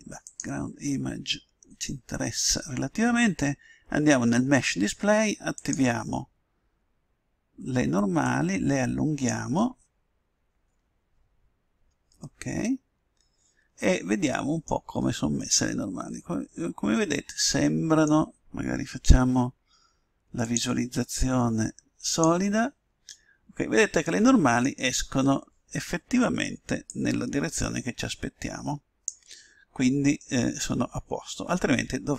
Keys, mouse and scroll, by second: 0.2-5.0 drag, 5.5-7.3 drag, 8.2-9.9 drag, 12.2-14.0 middle drag, 15.4-17.1 middle drag, 20.4-21.9 drag, 23.1-26.9 middle drag, 26.9-28.7 drag, 30.3-32.0 middle drag.